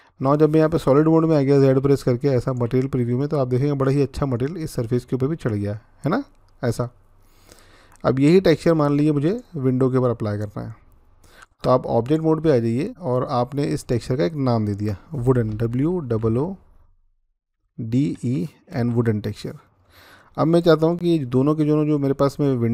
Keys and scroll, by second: 1.3-2.3 z, 15.5-18.5 typing, 18.8 Return, 21.1 typing.